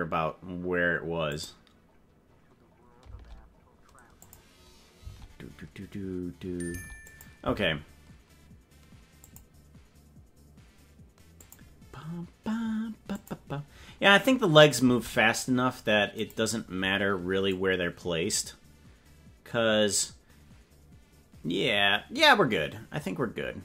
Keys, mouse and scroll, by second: 1.3 click, 3.1 space, 4.2 click, 5.0 space, 6.7 space, 7.1 click, 7.4 space, 9.2 click, 11.4 click, 13.2 click, 14.8 space, 16.1 click, 17.5 click, 19.7 click, 20.0 click.